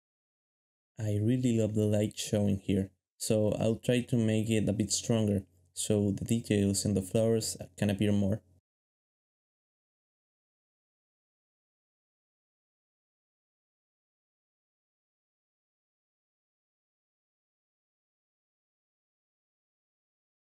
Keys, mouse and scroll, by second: 0.0-0.4 typing, 2.8 g, 5.2-6.4 typing, 10.0 alt+shift+z, 12.1 alt+shift+z, 13.3 alt+shift+z, 13.8 alt+shift+z, 15.3 alt+shift+z, 15.8 alt+shift+z, 18.8 g.